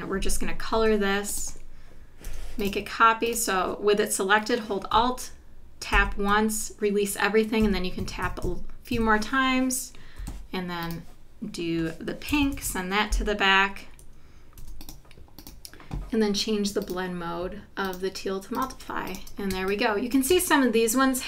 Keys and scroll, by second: 0.8 i, 2.3 v, 5.9 alt+Down, 7.6 Down, 8.9 Left, 10.2 i, 12.5 shift+super+[, 14.6 v, 19.5 space.